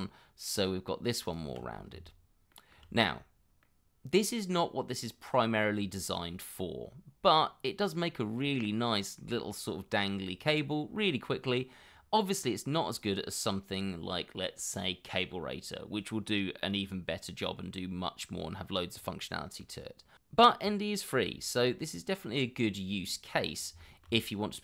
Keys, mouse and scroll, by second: 1.2 ctrl+click, 2.5 shift+middle click, 3.6 middle click, 6.9 scroll down 1, 7.3 middle click, 8.2 scroll down 1, 8.5 middle click, 12.0 scroll up 1, 19.6 middle click, 23.4 middle click.